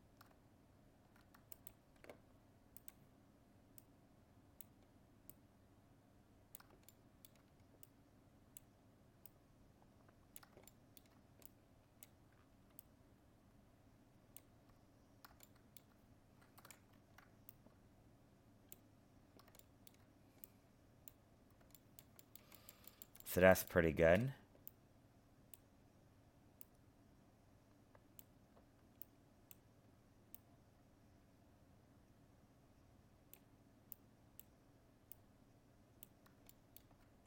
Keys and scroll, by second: 16.6 ctrl+z.